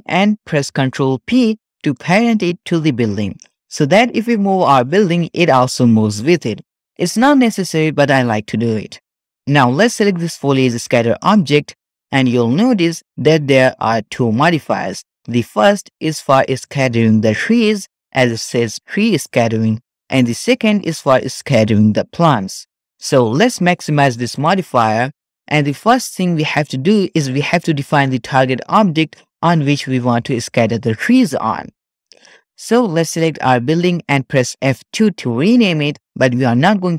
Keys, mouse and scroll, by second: 1.7 ctrl+p, 4.3 g, 11.2 click, 24.3 click, 33.1-34.9 drag, 34.9 F2.